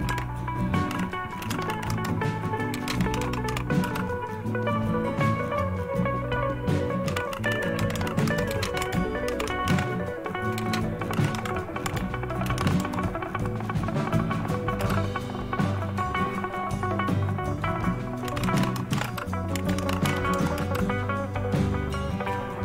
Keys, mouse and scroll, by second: 0.0-3.9 typing, 6.8-12.5 typing, 12.7 Tab, 14.8 Return, 18.0-20.6 typing.